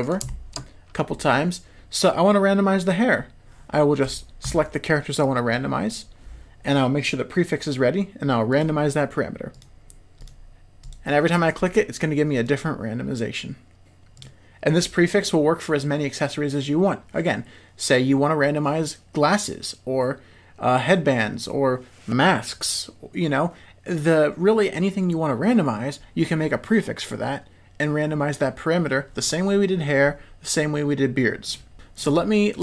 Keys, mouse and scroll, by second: 0.2 shift+middle drag, 1.1-1.7 middle drag, 4.4 click, 5.2 click, 9.5 click, 10.1 click, 10.8 click, 11.5 click, 12.3 click, 31.7 shift+middle click.